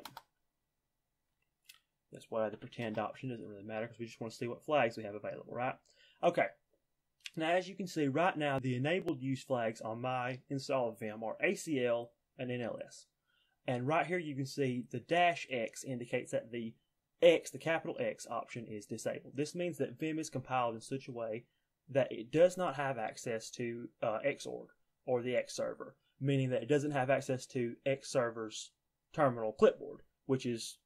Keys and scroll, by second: 2.6 y.